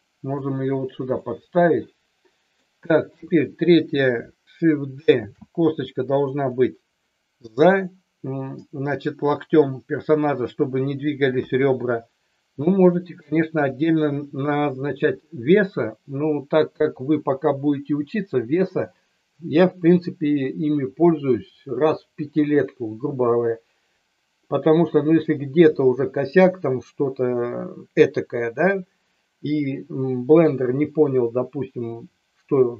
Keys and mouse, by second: 1.3-2.6 middle drag, 3.0 KP_3, 5.2 shift+d, 6.3 click, 11.4 KP_1, 13.5 KP_3.